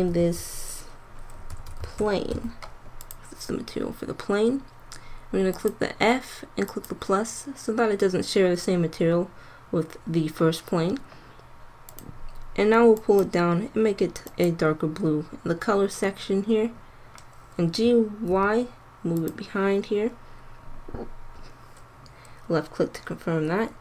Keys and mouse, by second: 5.5-7.4 drag, 8.2 click, 8.5-11.8 middle drag, 13.6-19.2 middle drag, 17.8 g.